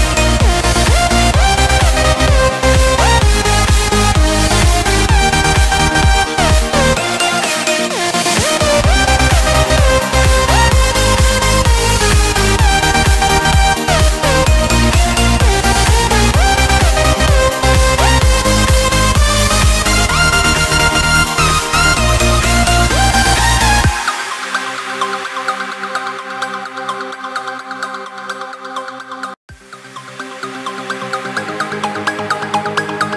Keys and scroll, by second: 2.6 ctrl+v, 3.8 ctrl+space, 6.0 ctrl+shift+[, 10.4 ctrl+space, 14.8 ctrl+z, 16.9 ctrl+space, 21.2 ctrl+space, 21.8 ctrl+v, 22.2 ctrl+space, 22.7 ctrl+shift+[, 26.3 ctrl+space, 31.9 ctrl+shift+], 32.4 ctrl+space.